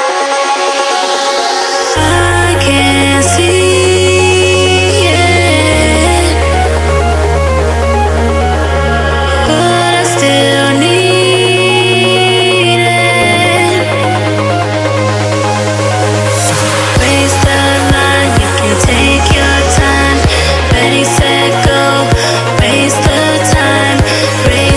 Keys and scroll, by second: 6.2 [, 7.7 ], 11.8 ctrl+d, 22.0 space, 23.5 ctrl+alt+space.